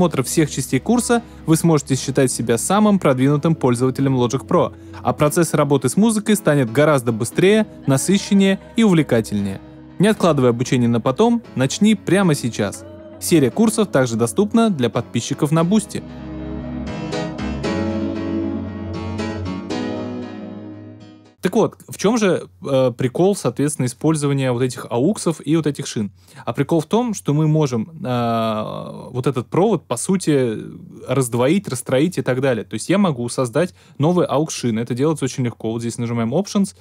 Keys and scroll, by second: 9.5 BackSpace.